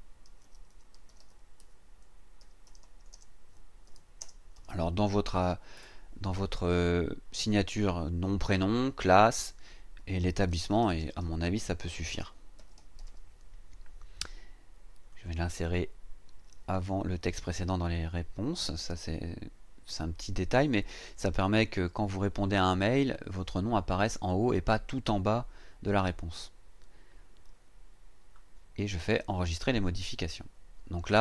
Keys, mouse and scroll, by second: 0.0-5.2 typing, 5.8 Return, 9.8-13.5 typing, 15.1 click, 27.0-27.3 scroll down 2, 27.6-28.2 scroll down 4, 29.3 click.